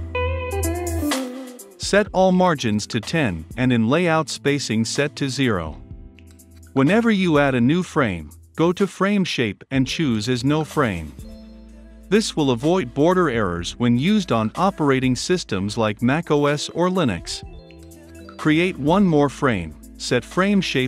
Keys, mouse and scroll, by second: 3.5 middle click, 3.5 scroll down 2.